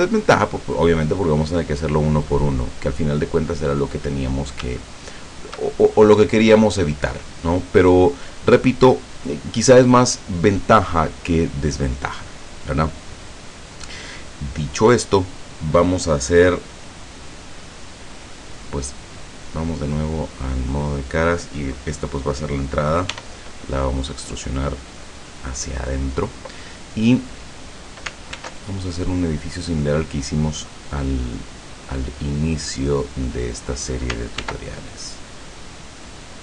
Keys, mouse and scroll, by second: 2.1-3.6 middle drag, 3.8-4.2 scroll up 1, 4.8 shift+middle click, 6.1-7.1 shift+middle drag, 7.9 scroll down 2, 16.6-18.5 middle drag, 19.7 click, 20.5 right click, 23.2 e, 25.4 click, 28.4 ctrl+r, 31.4 click, 33.6 click, 34.4 ctrl+r, 35.2 click.